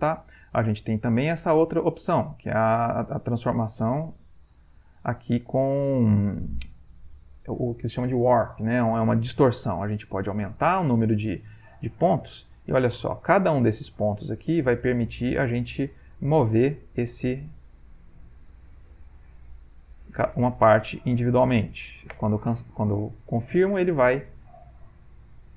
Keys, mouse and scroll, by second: 0.8 click, 3.0 click, 4.3 click, 11.2 click, 12.5-13.6 drag, 13.9 click, 14.9 click, 15.8 click, 16.7-17.8 drag, 18.4-19.4 drag, 19.9 click, 20.7 click, 22.2 Return.